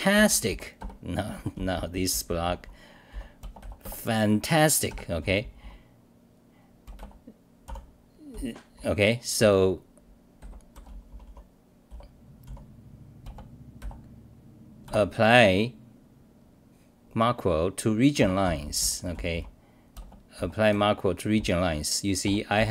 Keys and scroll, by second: 0.0-5.2 typing, 0.8 ctrl+g, 4.9 ctrl+g, 7.4-12.4 typing, 14.6-15.3 typing, 18.2 ctrl+g, 18.4-19.8 typing, 21.3 t, 22.2 ctrl+g, 22.5 w.